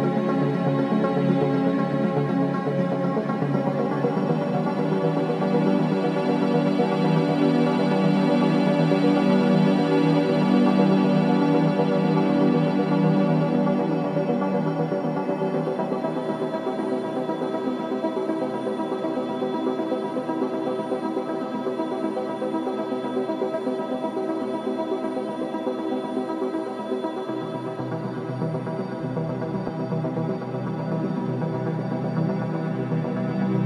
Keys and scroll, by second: 3.1 alt+shift+x, 5.9 KP_Decimal, 6.3 KP_2, 6.3 KP_5, 6.5 Return, 21.0 ctrl+shift+g, 21.5 space, 28.4 space, 32.9 ctrl+alt+shift+d, 33.4 d.